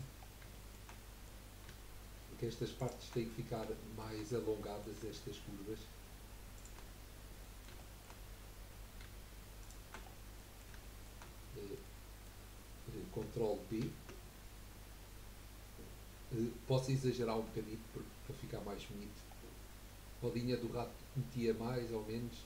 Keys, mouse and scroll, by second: 0.2 scroll down 2, 0.5-2.9 shift+middle drag, 2.9 shift+click, 3.3-4.3 middle drag, 4.3 scroll up 1, 4.7-6.5 middle drag, 6.5 shift+click, 7.0 scroll down 3, 7.4 middle click, 8.2-9.6 scroll up 8, 9.6 shift+click, 10.0-10.3 scroll down 4, 10.3-12.5 middle drag, 12.5 scroll up 1, 13.8 ctrl+b.